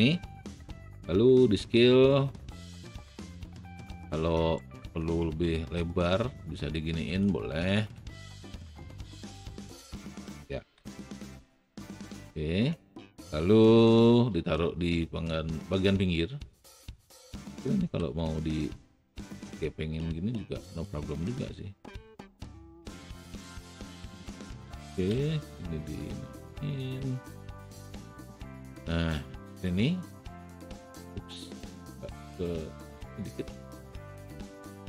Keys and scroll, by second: 0.4 r, 10.8 w, 17.9 alt+r, 21.2 a, 25.3 w.